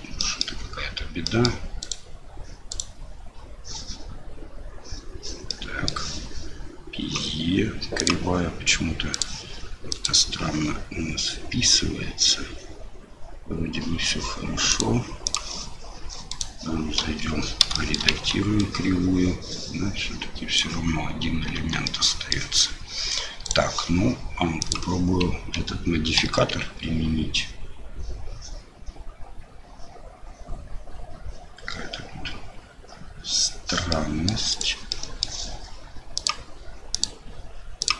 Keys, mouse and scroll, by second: 0.2 middle drag, 1.2 middle drag, 1.8 click, 2.7 click, 5.5 middle click, 8.0 click, 9.1 click, 14.7 click, 16.3 click, 17.0 KP_7, 17.8 shift+click, 18.1 Tab, 18.6-20.0 drag, 21.6 Tab, 21.8-22.3 drag, 23.4 right click, 24.6 click, 26.2 ctrl+a, 33.9 middle click, 34.5 click, 34.9-35.2 middle drag, 36.2 click, 37.0-37.9 drag.